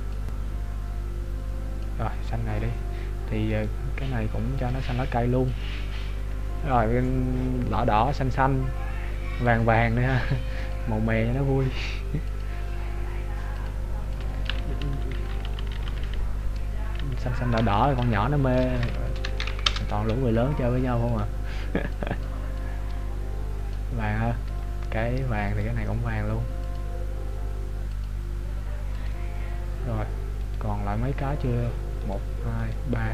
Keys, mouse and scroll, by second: 3.8 right click, 4.6 click, 9.7 right click, 10.7 click, 13.7 click, 15.2-17.1 Left, 17.8 shift+Right, 18.0 shift+Right, 21.2 click, 25.7 right click, 26.8 click, 28.1 click, 30.7 right click.